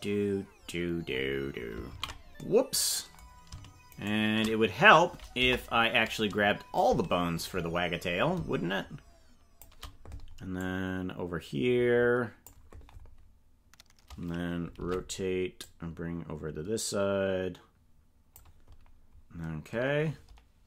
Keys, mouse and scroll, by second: 2.0 ctrl+z, 4.0 shift+right click, 5.4 KP_0, 6.8-9.6 shift+drag, 10.6-12.4 drag, 14.8 alt+r, 15.6-18.4 drag.